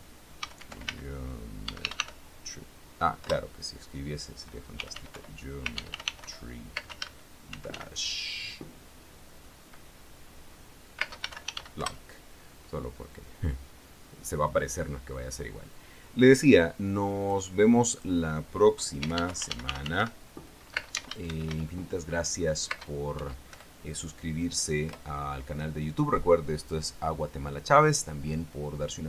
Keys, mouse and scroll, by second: 0.0-2.3 typing, 3.6 Return, 5.1-8.0 typing, 11.4 space, 11.6 l, 11.8 k, 11.9 e, 12.2 Return, 17.6 click, 18.2 click, 19.4-21.8 typing, 23.0 space, 23.5 1, 23.8 Return, 25.2 Return.